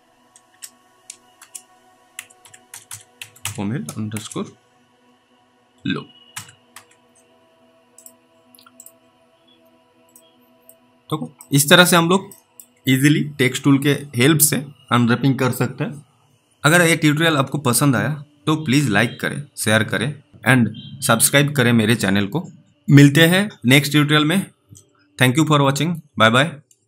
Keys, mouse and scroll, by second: 0.5-4.1 typing, 5.5-7.2 typing, 8.0 click, 9.5-10.5 scroll down 1, 10.5 middle click, 10.8 scroll down 1, 11.7 alt+middle click, 12.6 middle click.